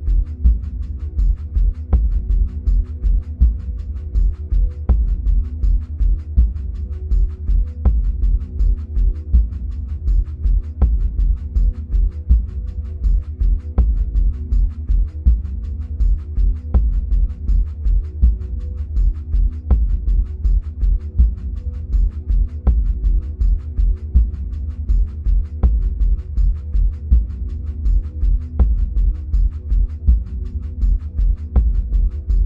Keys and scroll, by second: 4.8 1, 12.7 2, 12.9 5, 18.5 1, 18.9 0.